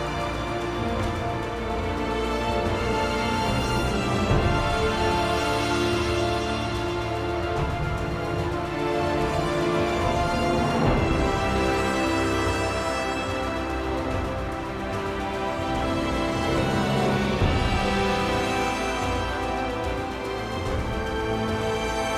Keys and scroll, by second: 1.0-3.0 typing, 4.6-7.0 typing.